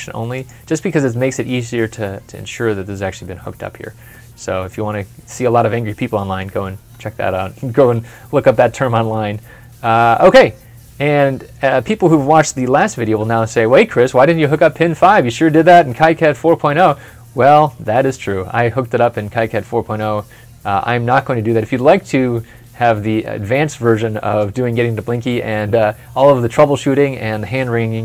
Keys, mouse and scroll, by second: 2.6 scroll up 1, 3.2 scroll down 1, 3.9 middle click, 16.2 middle click, 16.2 ctrl+F11.